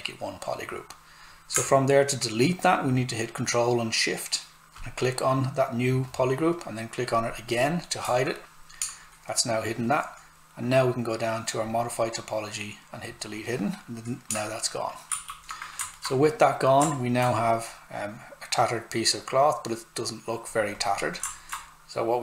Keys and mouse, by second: 0.7 click, 11.6 click, 15.1 shift+f, 15.9 alt+right click, 17.3 click, 21.3 alt+right click.